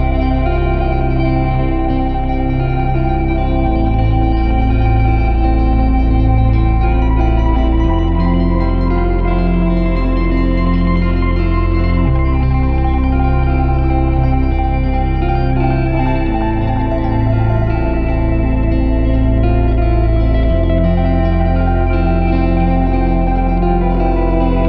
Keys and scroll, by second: 1.0 a, 3.5 a, 6.0 g, 7.5 g, 9.1 g, 10.8 Tab, 12.9 shift+/, 13.1 Tab, 14.7 l, 17.3 ctrl+i, 18.4 x, 20.0 `, 20.6 Tab.